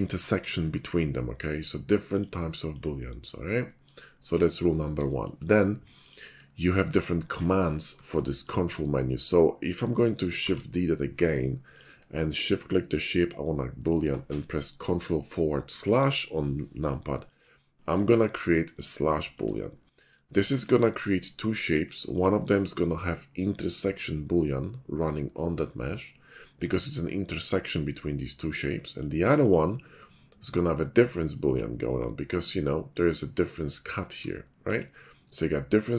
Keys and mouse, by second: 0.0 middle click, 2.1 middle click, 2.7 middle click, 5.2 shift+middle click, 5.9 middle click, 6.5-6.8 shift+middle drag, 10.4 shift+click, 10.4 shift+d, 10.8 click, 12.8 shift+click, 15.7 ctrl+KP_Divide, 18.1-18.7 middle drag, 20.2-20.6 shift+middle drag, 21.5 shift+middle click, 27.1-27.5 middle drag, 28.6-29.0 middle drag, 29.3 click, 31.9-34.8 middle drag, 35.6 middle click.